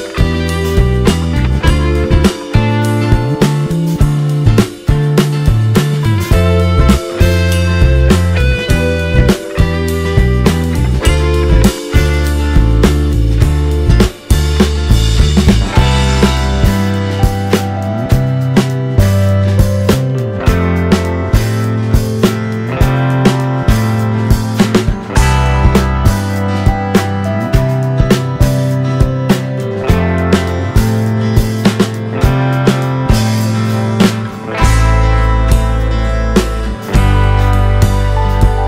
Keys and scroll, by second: 5.1 t, 12.3 space, 16.3-17.7 typing, 19.3-23.9 typing, 22.3 Return, 32.0 space.